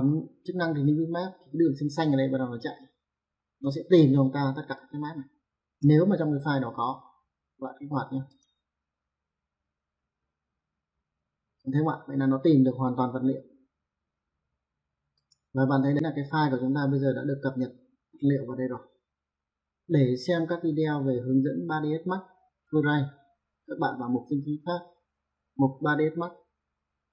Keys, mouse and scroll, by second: 4.8 click, 8.3 click, 15.2 click.